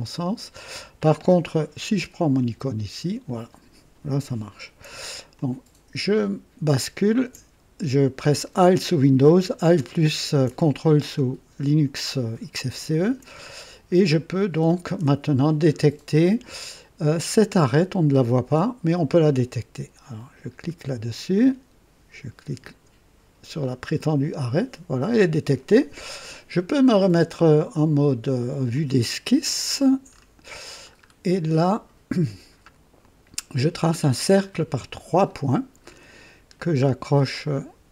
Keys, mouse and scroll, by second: 2.6 click, 5.3-7.3 ctrl+alt+drag, 13.3 scroll up 3, 14.1 click, 15.7 scroll up 1, 16.3 right click, 20.1 click, 22.6 click, 23.6-24.0 scroll up 2, 28.7 click, 29.6-30.4 scroll down 3, 30.9-31.2 scroll up 2, 33.0 click, 34.9 click, 35.8 scroll up 2, 36.5 right click.